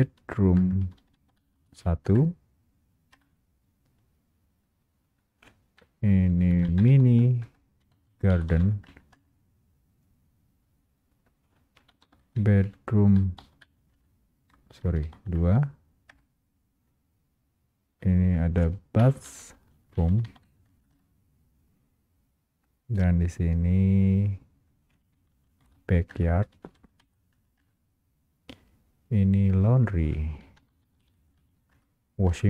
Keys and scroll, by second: 1.7 Return, 1.7 space, 2.1 Return, 7.5 Return, 12.5 Return, 14.9 space, 15.3 Return, 19.9 Return, 26.3 Return, 31.9 Return.